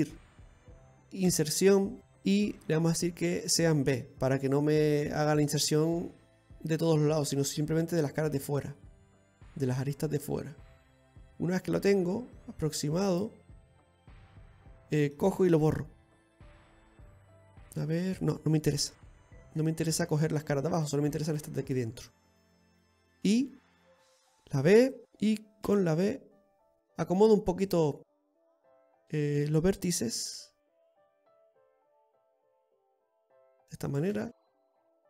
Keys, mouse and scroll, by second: 13.7-14.2 scroll up 1, 14.2 middle click, 14.2 scroll up 1, 18.8 ctrl+z, 19.2 ctrl+z, 20.0 middle click, 20.9 right click, 21.3 right click, 22.1 shift+right click, 22.4 middle click, 23.2 i, 27.7 click, 28.7 right click, 30.0 g, 31.6 right click, 31.9 g, 33.9 right click, 34.1 g.